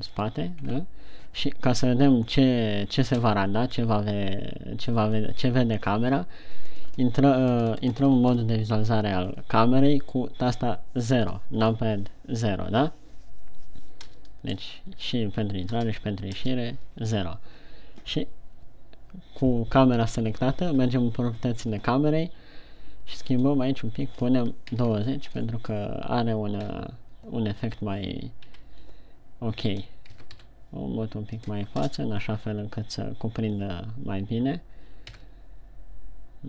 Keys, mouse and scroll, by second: 0.6 click, 1.0-2.1 scroll down 3, 3.5 KP_1, 11.7 KP_0, 14.5 KP_0, 15.1 KP_0, 16.2 KP_0, 16.9 KP_0, 23.6 click, 27.0 KP_3, 29.0 KP_3, 30.6 g, 31.8 click, 32.3 KP_0, 35.6 g.